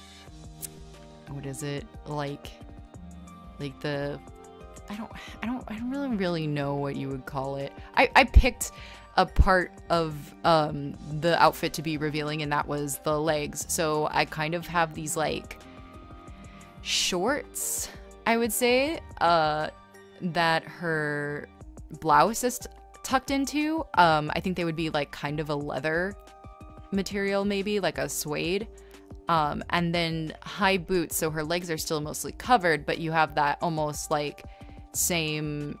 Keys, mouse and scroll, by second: 1.7 space, 6.6 space, 8.5 space, 9.8 ctrl+z, 17.0 ctrl+z, 17.6 ctrl+z, 19.2 e, 21.1 scroll, 21.6 scroll, 22.4 scroll, 25.7 space, 26.2 space, 26.9 e, 27.2 b.